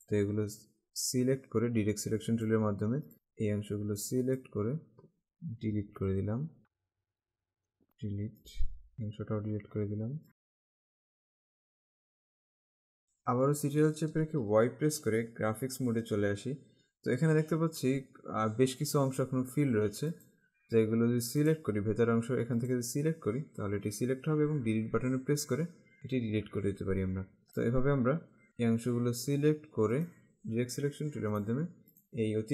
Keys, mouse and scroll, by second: 0.1 click, 5.9 Delete, 6.6 click, 7.0 click, 7.8 Delete, 8.4 click, 8.9 Delete, 10.3 click, 10.3 Delete, 10.6 click, 10.8 Delete, 11.1 click, 11.2 Delete, 11.4 click, 11.8 Delete, 12.0 click, 12.1 Delete, 12.3 click, 12.4 Delete, 14.0 ctrl+Caps_Lock, 20.2 click, 21.6 click, 25.0 Delete, 27.7 click, 28.5 Delete, 30.1 click, 31.5 click.